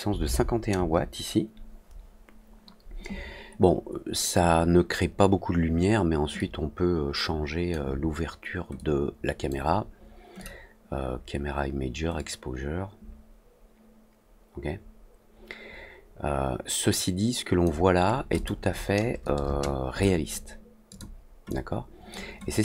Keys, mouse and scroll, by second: 8.7 click, 10.3 click, 12.1-17.6 drag, 18.3 click, 20.8 click, 21.4 click.